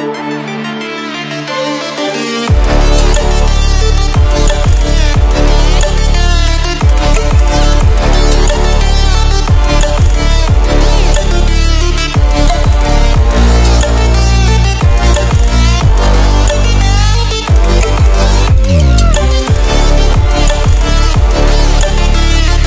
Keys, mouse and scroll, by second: 1.9 click, 3.2 ctrl+alt+scroll up 1, 4.3-13.4 drag, 13.4 ctrl+d, 15.6-18.0 drag, 18.0 right click, 20.7 click.